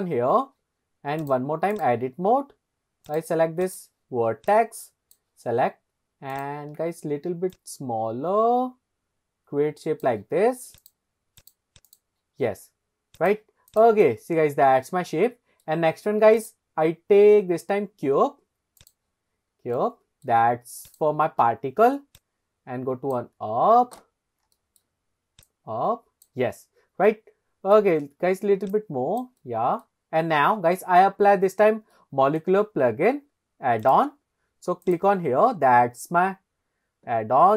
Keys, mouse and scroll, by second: 0.2 scroll up 1, 1.2-2.4 drag, 3.1 click, 3.6 click, 4.5 click, 6.3 click, 7.5 click, 10.8 click, 11.4-11.9 drag, 13.2 click, 14.0-15.6 middle drag, 16.4-16.9 drag, 19.4 scroll down 2, 19.8-20.2 middle drag, 20.9 click, 22.2 click, 22.3 click, 24.2 scroll down 1, 24.6-24.9 shift+middle drag, 25.4 click, 26.7-27.1 scroll up 1, 27.1-27.7 middle drag, 27.9-28.4 scroll down 1, 28.7 click, 29.4-29.9 middle drag, 30.2 scroll up 2, 31.5-31.9 scroll down 2, 31.9 middle click, 33.8 click, 34.8 click.